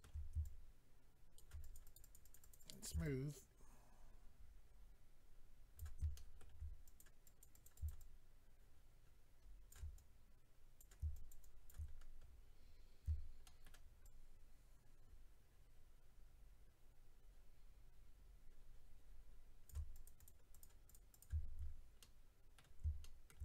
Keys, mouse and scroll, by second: 0.4 shift+click, 1.6 click, 1.7 click, 1.8 click, 1.9 double click, 2.0 click, 2.1 click, 2.2 click, 2.3 double click, 2.4 click, 2.5 click, 2.6 click, 2.7 double click, 2.8 double click, 2.9 shift+click, 3.0 shift+click, 6.1 shift+middle click, 6.8 click, 7.0 click, 7.2 click, 7.4 double click, 7.5 double click, 7.6 double click, 7.7 double click, 7.8 shift+double click, 7.9 double click, 9.9 click, 11.1 shift+click, 11.3 shift+click, 11.4 shift+click, 11.7 click, 11.9-12.7 scroll down 7, 12.7 scroll up 3, 13.4 shift+middle click, 14.0 shift+click, 19.9 click, 20.1 click, 20.2 click, 20.3 double click, 20.5 click, 20.6 click, 20.8 click, 20.9 double click, 21.1 click, 21.2 double click, 21.6-22.0 scroll down 4, 22.0 middle click.